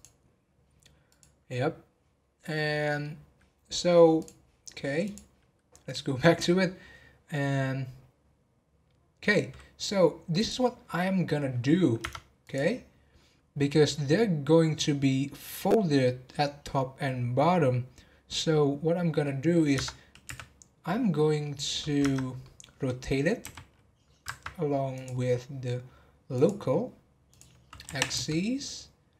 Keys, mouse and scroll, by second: 2.4 middle click, 3.0 scroll down 2, 4.1-7.3 drag, 10.3 click, 12.4 click, 18.7-19.2 scroll down 3, 19.2 middle click, 19.7 Tab, 21.4 middle click, 22.0 Tab, 22.4-23.4 middle drag, 23.4 r, 24.9-27.8 drag, 27.8 r.